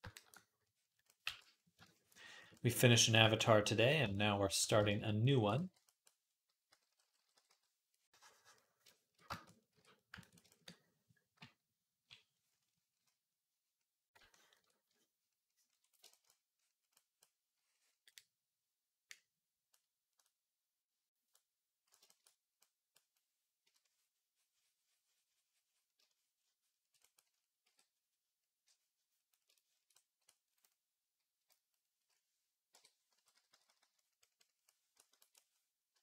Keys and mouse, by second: 0.0-2.8 shift+drag, 1.1 v, 4.6 shift+click, 5.7-7.3 typing, 9.5 d, 11.2 [, 11.7 [, 11.8 [, 17.0-21.3 drag, 22.6-27.0 drag, 27.5 d, 29.3 shift+click, 29.8 click, 31.2-36.0 drag, 31.2 KP_3, 32.5-33.6 typing, 35.7 i.